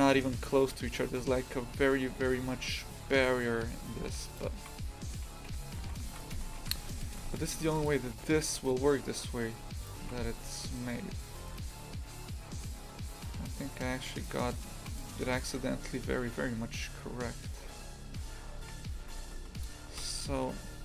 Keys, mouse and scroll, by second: 4.0 shift+f, 4.8 s, 5.8 shift+f, 6.3 Tab, 6.6 shift+f, 9.9 click, 10.0 shift+f, 14.1-15.5 right drag, 15.5 g, 18.6 shift+f, 20.0 KP_0.